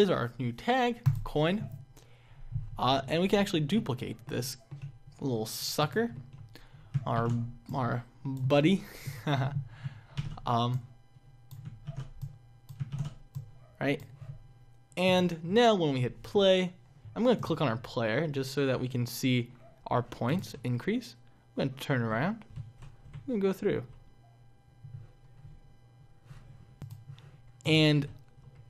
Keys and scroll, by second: 7.2 ctrl+d, 10.3 ctrl+d, 20.6 Left, 23.1 Up, 28.3 Down.